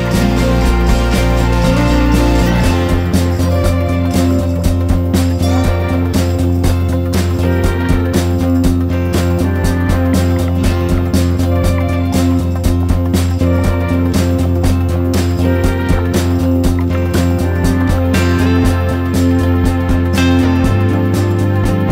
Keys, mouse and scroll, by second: 0.3 s, 2.3-2.8 scroll up 1, 2.8 ctrl+r, 4.2 1, 4.5 e, 5.9 g, 6.4 Tab, 6.7 click, 7.4-9.4 drag, 9.6-10.8 scroll down 2, 10.8-11.1 scroll up 2, 11.1 drag, 11.3 Tab, 11.7 3, 11.8 click, 12.0 shift+click, 12.1 shift+click, 12.4 shift+click, 12.8-14.9 typing, 13.4 Tab, 13.6 click, 14.4 Tab, 15.9 Tab, 16.2 Tab, 16.6 e, 17.2 a, 17.4 s, 18.8 shift+middle click, 19.0-19.6 scroll up 1, 19.6-21.2 drag, 21.2 Tab, 21.4 Tab, 21.6 click, 21.8 scroll down 1.